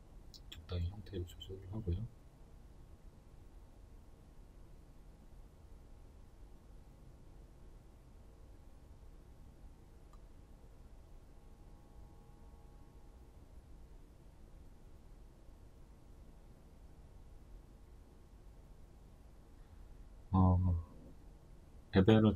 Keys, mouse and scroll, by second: 1.4 g, 2.9 click, 3.2 s, 5.3 click, 7.5-20.0 shift+middle drag, 7.8-8.5 scroll, 9.6 z, 10.3 scroll, 14.5 z, 17.2 scroll, 20.0 right click, 20.5 right click, 21.0 right click, 21.8-22.3 shift+middle drag, 22.2-22.3 scroll up 2.